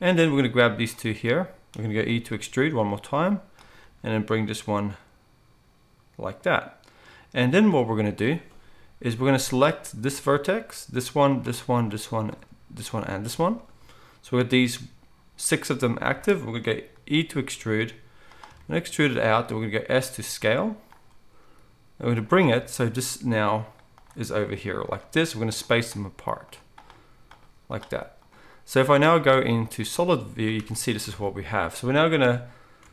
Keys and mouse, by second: 0.7-9.9 drag, 2.1 e, 3.8 g, 9.9-16.6 shift+middle drag, 17.5 e, 19.0-32.9 middle drag, 19.4 s, 21.4 g, 22.9 g, 25.0 g, 25.9 g, 27.8 g, 29.1 z, 31.0 alt+a.